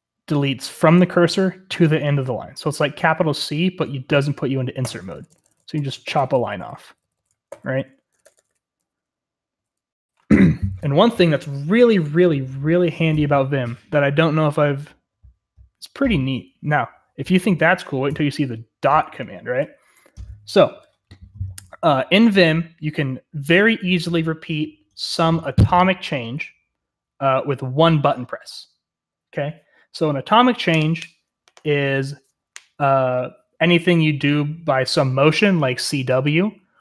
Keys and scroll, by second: 4.8-8.6 typing, 19.7-20.3 typing.